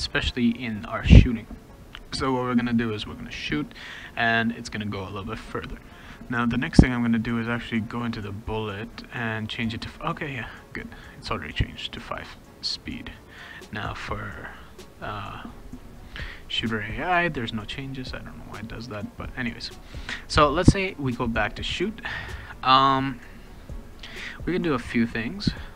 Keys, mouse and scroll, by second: 5.9 click, 7.2 click, 7.6 click, 10.9 click, 11.6 click, 13.3 click, 13.5 click, 16.9 click, 22.0 click, 23.1 click.